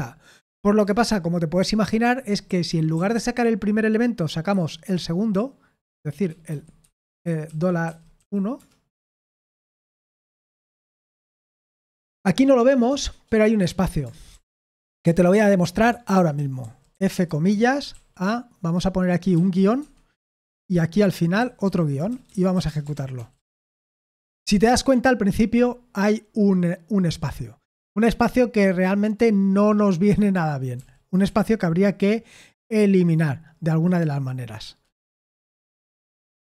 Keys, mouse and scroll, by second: 0.8 Return, 1.3-4.5 typing, 6.0-8.7 typing, 9.0 ctrl+p, 9.3 ctrl+p, 9.7 Return, 14.3 ctrl+p, 14.8 ctrl+p, 15.2 Return, 15.9-18.4 typing, 19.8 Escape, 19.8-23.2 typing, 23.6 Return, 30.8 ctrl+p, 31.3 ctrl+p, 35.3 ctrl+p, 35.8 ctrl+n.